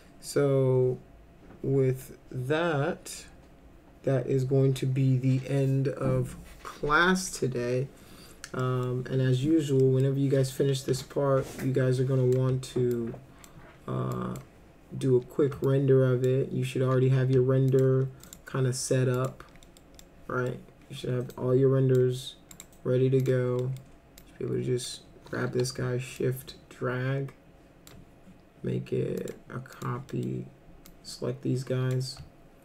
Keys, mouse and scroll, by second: 8.6 middle click, 9.8 middle click, 10.9 F3, 11.6-12.4 drag, 12.9 ctrl+click, 14.1 ctrl+click, 15.6 ctrl+click, 17.7 ctrl+click, 18.3 right click, 19.2 click, 19.7 middle click, 20.0-20.5 middle drag, 21.3-22.0 drag, 22.5 right click, 23.2 click, 23.6 middle drag, 24.2 click, 25.5 w, 26.2-27.9 shift+drag, 29.2 click, 29.7 click, 30.1 middle click, 30.9-31.9 drag.